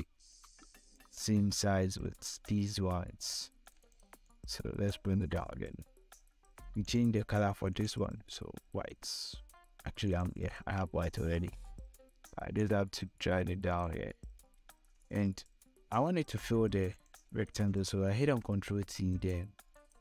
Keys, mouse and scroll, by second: 4.2 shift+click, 9.6 click, 10.5 scroll down 1, 11.1 scroll up 1, 12.1-13.6 drag, 13.6 scroll down 1, 14.7 scroll up 1, 16.4 click, 17.8 ctrl+t, 19.6 click.